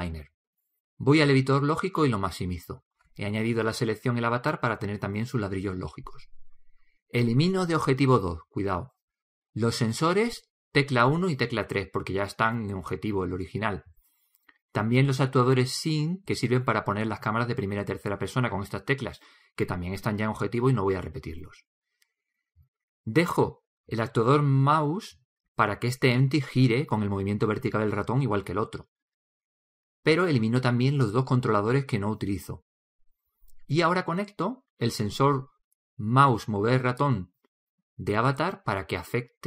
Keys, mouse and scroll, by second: 0.8-2.7 drag.